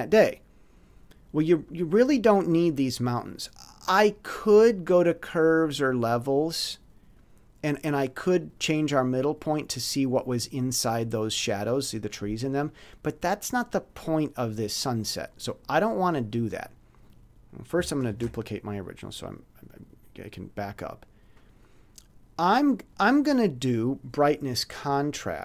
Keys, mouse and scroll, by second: 3.8 click, 5.6 click, 8.5-9.6 drag, 16.0 click, 17.0 click, 18.1 ctrl+shift+d, 20.6 click, 25.2 click.